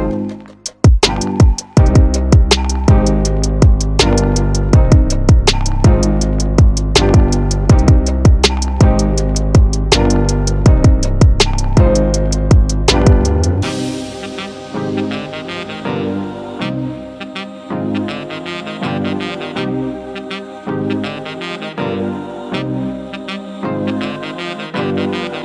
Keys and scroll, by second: 2.8 v, 2.9 super+-, 2.9 super+0, 3.1 super+-, 4.1 |, 4.3 super+d, 4.5 super+c, 4.6 super+d, 4.6 super+v, 5.9 Return, 6.1 super+1, 6.4 Return, 7.1 w, 7.7 v, 8.1 super+t, 8.3 Return, 8.9-11.4 typing, 11.4 super+0, 11.7 super+=, 11.7 super+t, 12.6 Return, 24.1 1, 24.8 BackSpace.